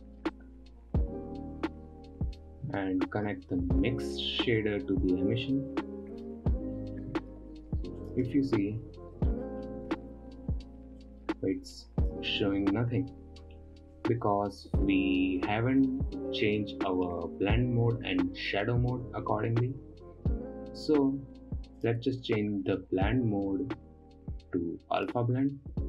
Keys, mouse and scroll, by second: 5.1 click, 8.6 ctrl+shift+click, 9.2-9.6 scroll down 6, 9.7-11.4 middle drag, 11.4 click, 12.5 click, 13.0-13.5 scroll up 5, 13.5-14.5 middle drag, 14.5 click, 16.2 click, 16.8-17.5 scroll down 2, 17.5-18.2 scroll up 1, 22.3-25.4 drag.